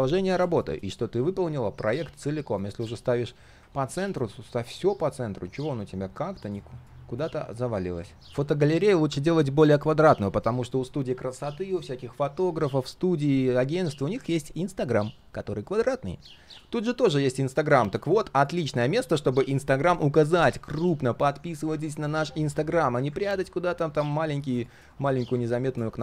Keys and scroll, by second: 4.9 alt+h, 16.5 ctrl+z.